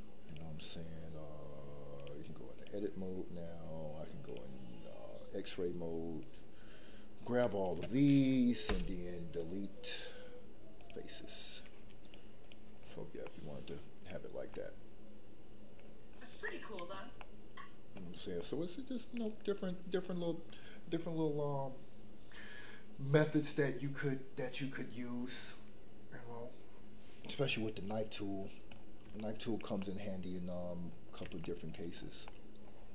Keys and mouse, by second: 2.0-2.6 drag, 4.3 click, 6.3-7.5 drag, 8.6 Delete, 12.2 click, 13.2-14.1 middle drag, 14.5-15.9 middle drag, 16.4-16.8 shift+middle drag, 17.1 middle click, 18.3-19.2 middle drag, 27.9-28.3 middle drag, 29.1-29.5 shift+middle drag, 29.7-30.7 middle drag, 31.4 shift+middle drag, 32.2 middle click.